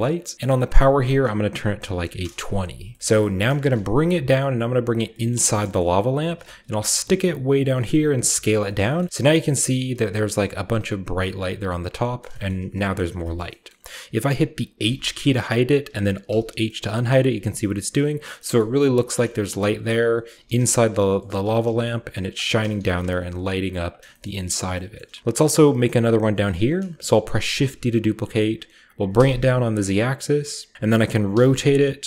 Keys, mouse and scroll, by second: 0.0-0.6 scroll up 1, 0.0 typing, 0.3 middle click, 0.6-1.8 drag, 1.8 typing, 2.2 Return, 2.9-3.3 shift+middle drag, 3.3-4.2 typing, 3.3-4.8 scroll up 1, 3.4-4.8 middle drag, 4.8 click, 5.4 shift+middle click, 5.6-6.4 typing, 5.7-7.5 shift+middle drag, 5.7-7.5 shift+scroll up 3, 7.5 click, 7.8-9.7 typing, 8.4 drag, 8.6-10.5 shift+middle drag, 8.8-10.5 shift+scroll up 1, 10.7 click, 10.8 typing, 11.0 click, 11.5 scroll down 1, 11.7 middle click, 12.3 shift+middle click, 12.3-14.8 shift+scroll up 1, 12.5 shift+middle click, 13.0 shift+middle click, 13.4 shift+middle click, 13.7 middle click, 14.3-15.9 middle drag, 14.8-15.9 scroll up 1, 14.8 typing, 16.3 alt+h, 17.1 h, 18.2-20.0 scroll down 1, 18.6-20.0 middle drag, 19.0 g, 20.1 right click, 20.4-23.0 typing, 20.7 click, 21.9 drag, 22.5-24.0 shift+middle drag, 23.3 shift+drag, 24.1 shift+middle drag, 24.7-26.3 shift+scroll up 1, 25.0-26.3 shift+middle drag, 27.5 typing, 29.2 typing, 30.5 click, 31.3-32.0 typing.